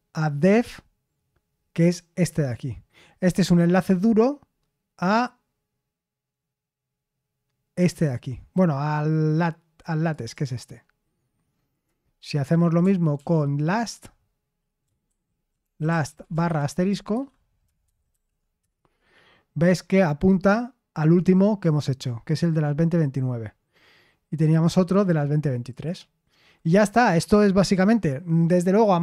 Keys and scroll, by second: 13.1 ctrl+p, 15.0 ctrl+w, 15.3-16.9 typing, 18.1 typing, 18.6 Return.